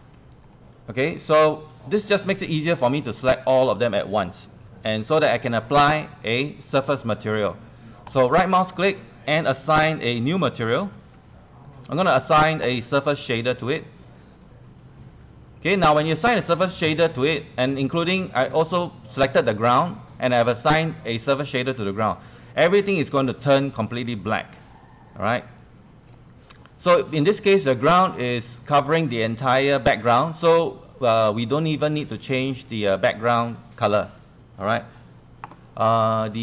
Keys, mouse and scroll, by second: 1.4 click, 8.1-11.3 right drag, 12.6 click, 25.6 click, 26.6 click.